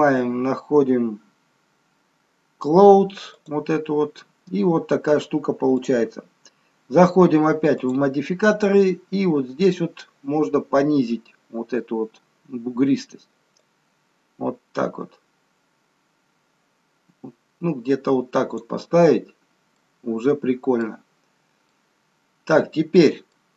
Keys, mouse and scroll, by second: 7.7 click, 14.1 click, 19.3 scroll up 1, 19.7 middle click, 21.1-21.7 scroll down 2, 21.7 middle click.